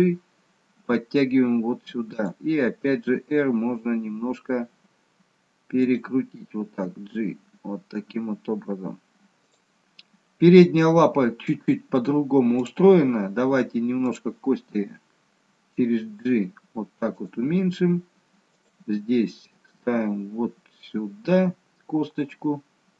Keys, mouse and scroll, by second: 3.1 r, 6.9 g, 12.6 click, 14.2 click, 14.8 g, 18.5 click, 18.8 g.